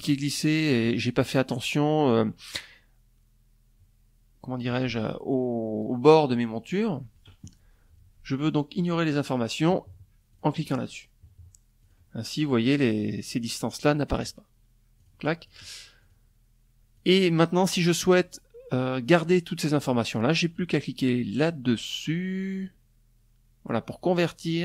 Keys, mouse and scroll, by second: 7.3 click, 8.8 click, 10.4 click, 13.5 click, 14.0 click, 14.6 click, 15.5 click.